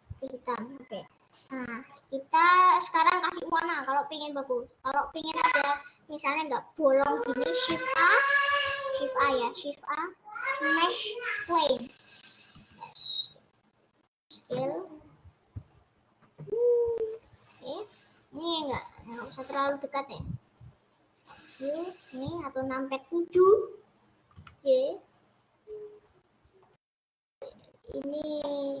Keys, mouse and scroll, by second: 1.5-2.2 scroll up 5, 2.2 scroll up 1, 2.6 scroll down 1, 2.8 middle click, 3.6 scroll down 3, 4.2 scroll down 2, 11.9-12.6 scroll down 2, 12.6 s, 17.5-18.0 scroll up 6, 18.0-18.6 scroll down 7, 19.2 click, 19.4-23.4 middle drag, 23.4 KP_7, 24.3 g, 27.6-28.6 middle drag, 28.6-28.8 scroll up 7.